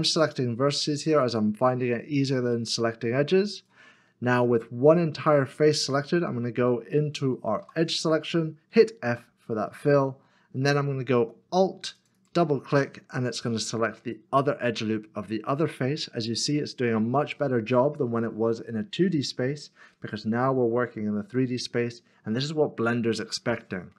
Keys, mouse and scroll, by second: 3.6-5.6 scroll down 1, 9.1 2, 11.4 f, 12.0 alt+click, 14.0 alt+click, 14.2 middle click.